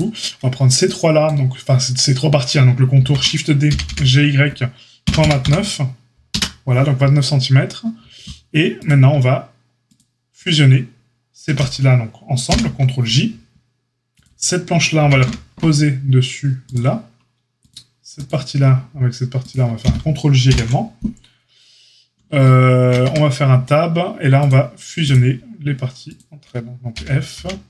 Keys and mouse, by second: 2.9 shift+d, 12.4 ctrl+j, 14.9 g, 17.6 click, 17.7-24.4 middle drag, 19.4 shift+click, 20.4 ctrl+j, 23.0 Tab, 24.4 click, 25.0-27.6 shift+middle drag, 26.9 g.